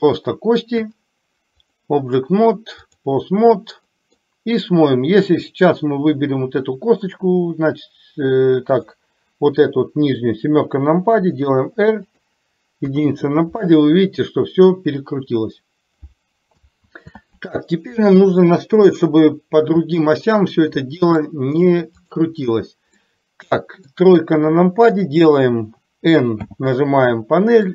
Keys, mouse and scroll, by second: 0.1 click, 1.7-3.2 drag, 4.1 middle click, 8.8 click, 9.8 KP_7, 11.3 r, 12.9 KP_1, 16.9 ctrl+z, 18.9 KP_7, 20.4-21.3 middle drag, 22.2 click, 23.2 middle click, 24.6 KP_3, 26.4 n.